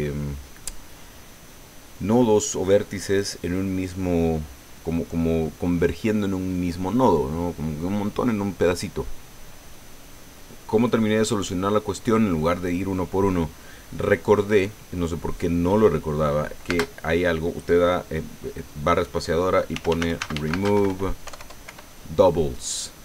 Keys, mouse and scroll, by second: 16.7 space, 19.5-21.7 typing.